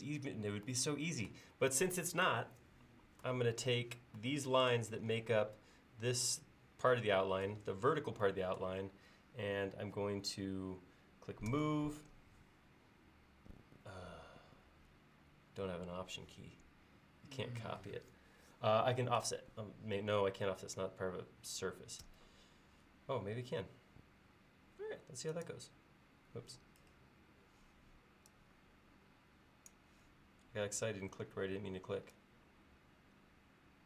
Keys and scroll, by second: 11.5 m, 22.1 f.